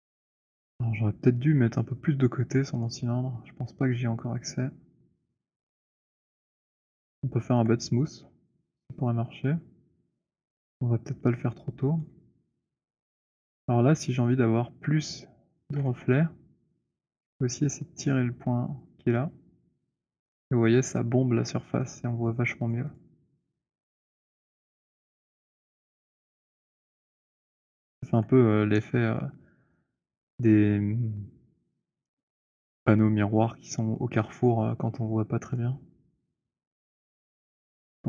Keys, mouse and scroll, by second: 0.5-1.2 alt+scroll, 2.6 click, 4.9 alt+middle click, 6.8 alt+right click, 7.5 alt+middle click, 12.0 right click, 13.1 click, 15.7 middle click, 16.0 f, 20.0 click, 22.7 click, 22.7 right click, 23.4 middle click, 23.6 middle click, 25.4 middle click, 25.4 alt+click, 25.9 alt+click, 25.9 scroll, 27.9 alt+click, 29.3 alt+middle click, 29.7 alt+right click, 30.2 alt+middle click, 35.3 click, 37.3 alt+click.